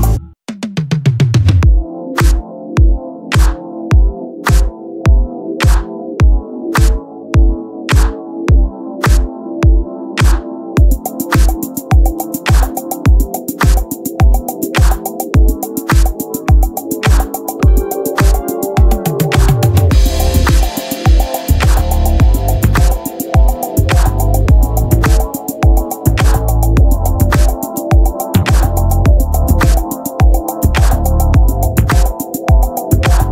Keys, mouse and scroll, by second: 0.2-2.5 drag, 0.4 z, 0.8 c, 2.8 Tab, 3.4 Tab, 3.6 a, 3.7 a, 4.3 shift+d, 6.5 s, 7.9-10.8 drag, 8.6 s, 11.1-12.3 right drag, 11.8-14.5 typing, 12.3-13.6 drag, 13.2 right click, 17.4 a, 17.5 a, 18.0 shift+d, 20.5 a, 20.8 a, 21.5 shift+d, 24.1-25.5 drag, 26.8-33.3 drag.